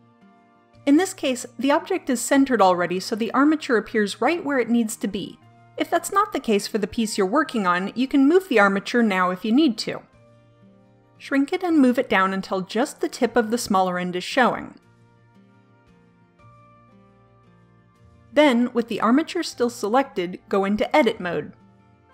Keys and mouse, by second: 1.9-3.8 middle drag, 6.5-7.5 drag, 9.3 ctrl+z, 11.1 s, 13.3 KP_1, 14.8 middle click, 17.1-18.3 middle drag, 19.3 click.